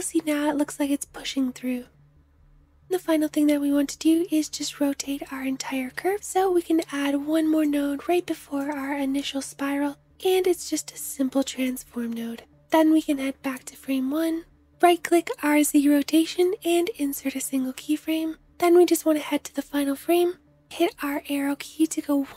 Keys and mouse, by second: 2.6 space, 3.2 ctrl+z, 9.7 shift+click, 9.9 shift+a, 10.0-12.7 drag, 12.6 space, 20.7 Right.